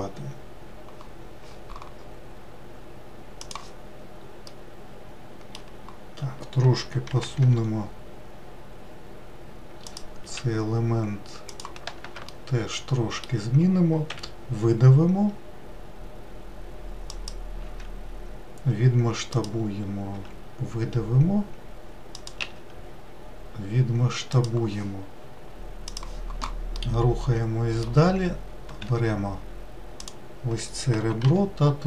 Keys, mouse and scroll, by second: 4.6-7.2 middle drag, 7.2 g, 10.3 s, 12.4-14.2 shift+middle drag, 14.2 e, 17.7 s, 20.2 e, 22.5 s, 26.6-28.7 middle drag, 28.7 2, 29.8 click, 31.1 g.